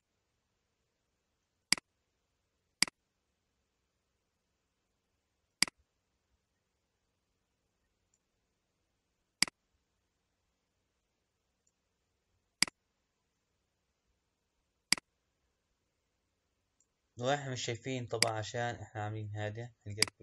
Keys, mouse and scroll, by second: 1.6 click, 2.7 click, 5.5 click, 9.4 click, 12.6 click, 14.9 click, 18.2 click, 19.9 click.